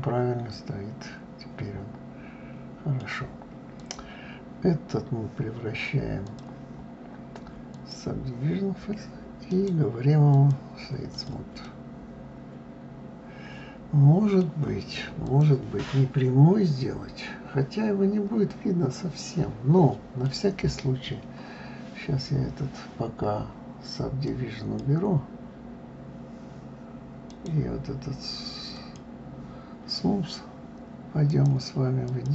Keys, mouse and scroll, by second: 3.8 click, 6.3-9.3 drag, 9.5-11.1 right drag, 11.1 click, 11.6-14.6 middle drag, 15.2 click, 15.8-18.9 middle drag, 24.2 click, 27.3-31.3 right drag, 31.3-32.3 drag.